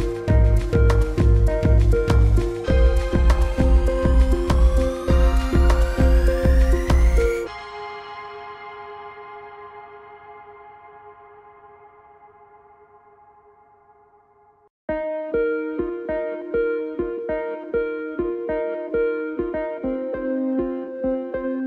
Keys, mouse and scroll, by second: 4.2 m, 4.7 click, 5.8 i, 6.0 click, 6.3 v, 6.7 click, 8.3 alt+scroll down 1, 8.6 click, 9.1 space, 9.9 click, 11.4 [, 11.9 alt+scroll up 1, 12.2 click, 12.9 ctrl+shift+[, 13.4 click, 20.5 click, 21.0-21.6 typing.